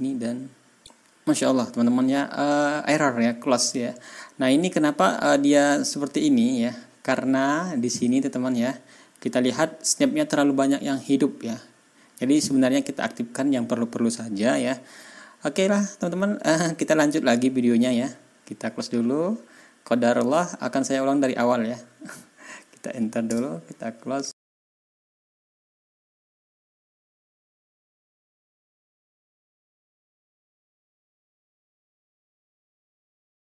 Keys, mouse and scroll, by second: 23.2 Return, 24.4 ctrl+scroll down 4, 24.7-25.0 ctrl+scroll up 3, 24.8 click, 24.9 ctrl+shift+click, 25.1 ctrl+shift+click, 25.3 ctrl+scroll down 1, 25.4 click, 25.8 click, 25.8 KP_Decimal, 25.9 ctrl+shift+click, 26.1-26.7 ctrl+shift+scroll up 1, 26.3 KP_Decimal, 26.7 click, 27.0 click, 27.2 shift+click, 27.3 shift+click, 27.4 right click, 27.4 click, 27.6 ctrl+shift+click, 27.6 ctrl+scroll down 2, 27.7 ctrl+shift+d, 27.8 click, 27.9 click, 28.2 shift+click, 28.3-28.9 ctrl+scroll up 8, 28.5 ctrl+d, 28.6 ctrl+d, 29.2 shift+middle click, 29.4 ctrl+scroll up 2, 29.8 KP_Decimal, 30.0 middle click, 30.3 ctrl+d, 30.5 KP_Decimal, 30.9 click, 31.1 ctrl+scroll down 4, 31.5 click, 31.5-32.6 ctrl+scroll up 8, 31.6 click, 32.2 click, 32.5 click, 32.6 click, 32.6 ctrl+d, 33.2 middle click.